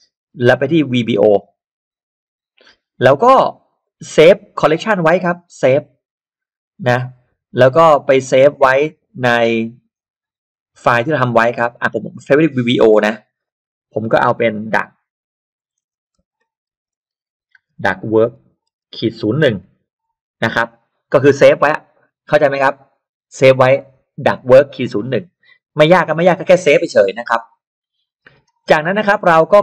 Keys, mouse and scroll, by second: 1.3 click, 3.1 click, 5.7 click, 11.0 middle click, 11.0-11.4 scroll down 2, 12.1 click, 12.3 click, 13.4 click, 15.2-20.0 typing, 20.1 Return, 29.3 middle click, 29.3-29.6 scroll down 2.